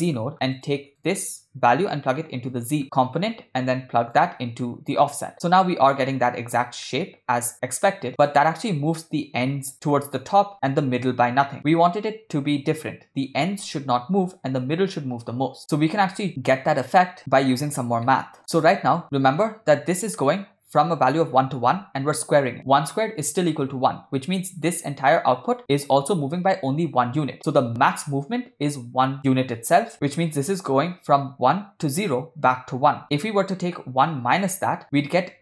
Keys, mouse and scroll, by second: 1.7-2.8 drag, 2.8 middle click, 4.2-5.0 drag, 6.9-8.3 middle drag, 11.5 middle drag, 18.1 ctrl+middle click, 18.4 click, 19.1 middle click.